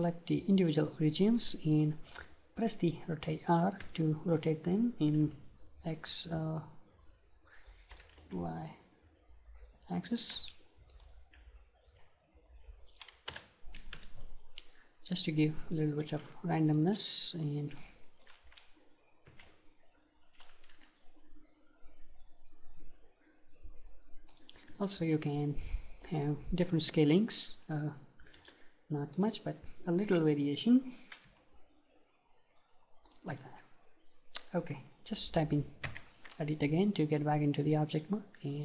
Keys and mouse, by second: 3.9 r, 10.2-11.9 drag, 10.4 space, 11.9 y, 13.4 r, 15.8-17.8 drag, 16.8 space, 19.4 r, 24.4-26.1 drag, 24.8 s, 27.2-29.2 drag, 28.4 space, 31.3 s, 33.2-35.4 drag, 35.9 Tab, 37.2-38.6 middle drag.